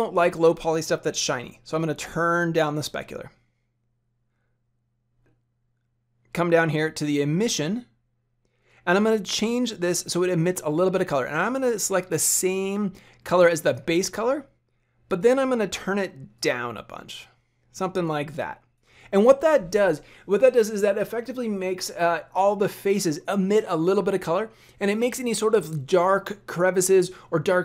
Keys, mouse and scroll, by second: 1.8 click, 3.9-4.9 scroll down 1, 4.9-9.3 scroll down 8, 9.3 click, 15.1 click.